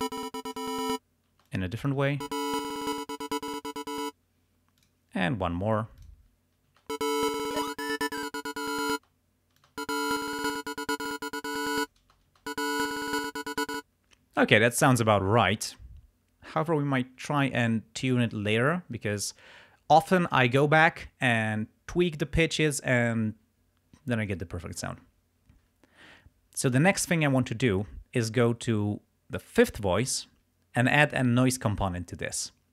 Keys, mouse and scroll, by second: 1.4 space, 1.5 click, 2.1 space, 2.6-3.8 drag, 4.0 space, 4.8 click, 6.0 click, 6.9 space, 7.4-8.9 drag, 9.0 space, 9.7 click, 10.2 click, 10.8-12.1 drag, 12.1 space, 13.7 space, 29.6 click.